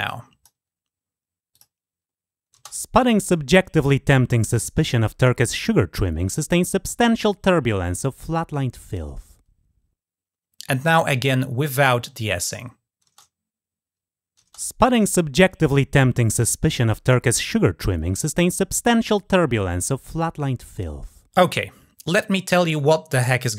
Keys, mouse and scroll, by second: 1.3 click, 11.6 click.